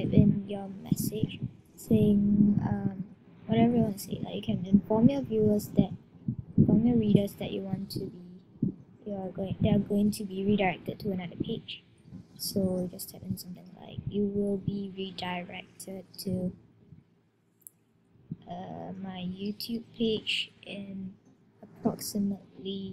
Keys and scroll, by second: 10.6 shift+t, 12.4 shift+y, 16.8-17.5 typing, 18.7-19.5 typing, 21.2 typing.